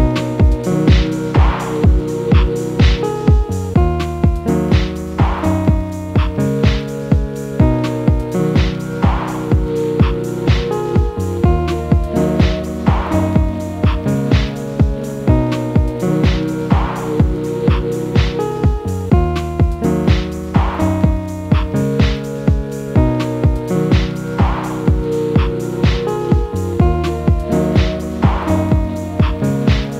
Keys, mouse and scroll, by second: 7.9 Delete, 10.0 ctrl+m, 14.6-15.5 typing, 16.5-17.4 typing.